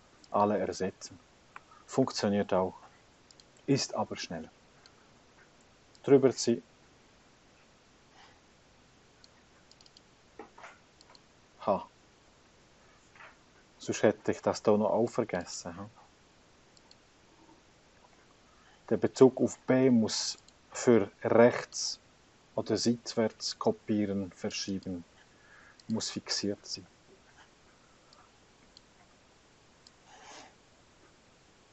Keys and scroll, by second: 1.7 Escape, 2.1 Escape, 13.7 F4, 13.9 Return, 17.7 F4, 18.1 Return, 23.1 F4, 23.3 Return, 26.3 F4, 26.9 Return.